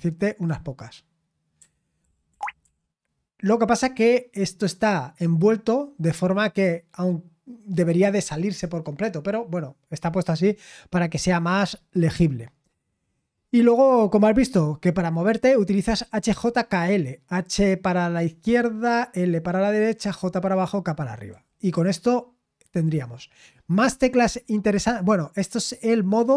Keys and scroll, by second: 1.6-2.3 typing, 3.4 typing, 21.3-21.7 typing.